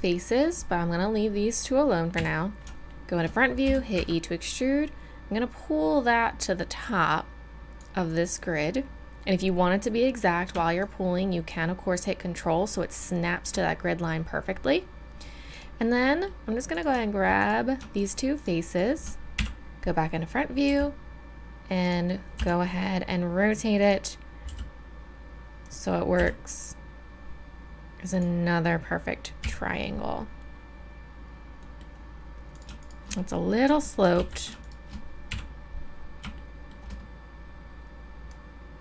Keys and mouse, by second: 0.2-2.1 drag, 2.1 KP_1, 3.6 e, 10.8-16.1 drag, 16.1-19.3 middle drag, 19.3-20.7 drag, 19.3 KP_1, 20.7 g, 22.3 r, 24.4 g, 26.1 r, 29.4 a, 31.6-34.1 right drag, 34.1 ctrl+z, 35.3 KP_1, 38.3-38.8 drag.